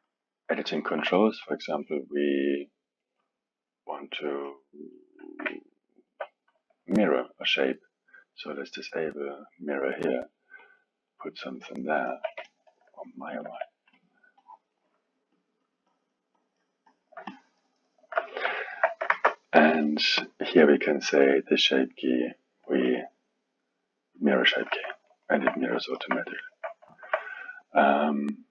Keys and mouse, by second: 0.7-2.6 alt+middle drag, 3.0-5.4 drag, 5.4 ctrl+Tab, 9.1 click, 10.1-18.5 drag, 18.5 alt+middle click, 19.1 ctrl+Tab, 20.2-20.6 drag, 23.5-25.0 drag, 25.0-28.5 alt+middle drag.